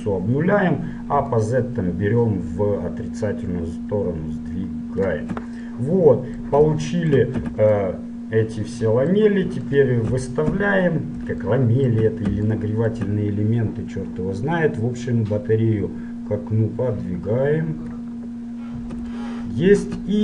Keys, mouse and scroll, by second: 1.5-3.5 drag, 5.9-9.9 middle drag, 7.6 z, 9.9-11.7 right drag, 10.6 KP_7, 11.7-14.3 middle drag, 14.3-16.1 drag, 18.6 middle click.